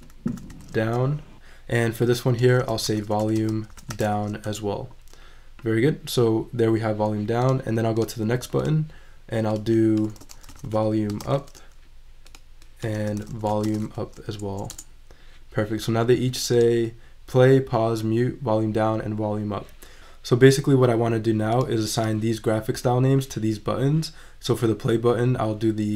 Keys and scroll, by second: 0.0-1.0 typing, 2.6-4.5 typing, 10.2-11.3 typing, 13.0-14.3 typing.